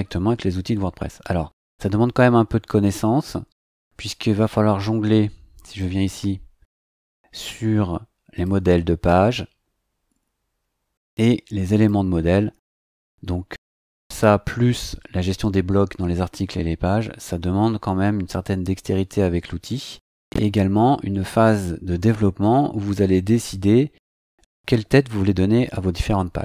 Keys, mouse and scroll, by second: 5.6 click, 8.3 click, 11.7 click.